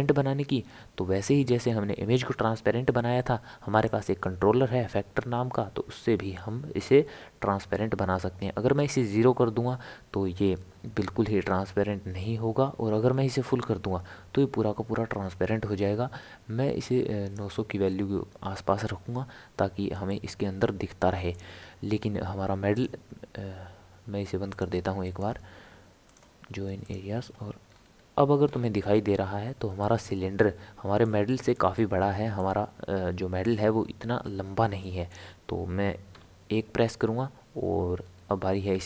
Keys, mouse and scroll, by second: 3.8-6.9 drag, 20.1-22.7 middle drag, 22.7-24.6 right drag, 25.0-27.6 right drag, 27.6 scroll down 1, 27.7 scroll up 1, 27.8 scroll down 1, 27.9-28.4 scroll up 1, 28.4-29.0 scroll down 2, 29.0-29.8 scroll down 3, 29.8-36.1 middle drag, 36.1 KP_1, 38.0-38.5 scroll up 4.